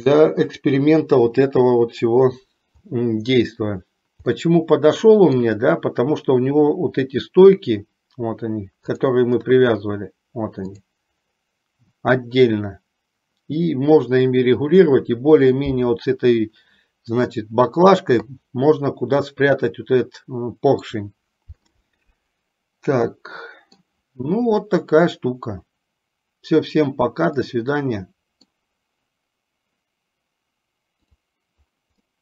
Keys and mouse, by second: 4.4-5.5 middle drag, 23.2-24.0 middle drag, 27.7 middle click.